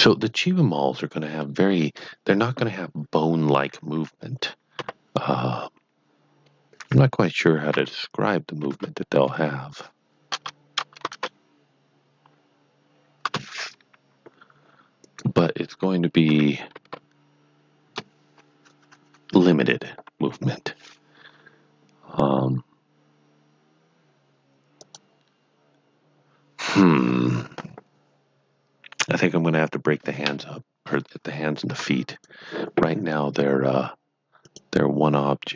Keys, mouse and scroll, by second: 0.6 middle click, 4.7 middle click, 4.8 KP_7, 8.6 KP_3, 9.2 KP_Subtract, 10.3 BackSpace, 10.8 BackSpace, 11.0 KP_4, 13.2 KP_Enter, 15.0 click, 16.2 r, 16.7 KP_4, 17.8 KP_Enter, 20.2 KP_1, 24.8 click, 31.6 click, 31.7 Tab, 32.1 click, 34.4 click.